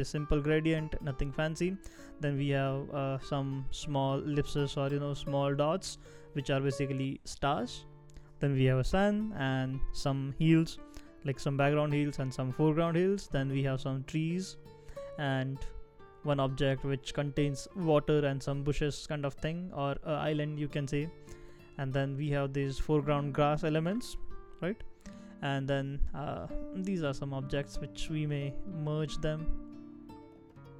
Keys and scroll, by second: 18.4 super+z.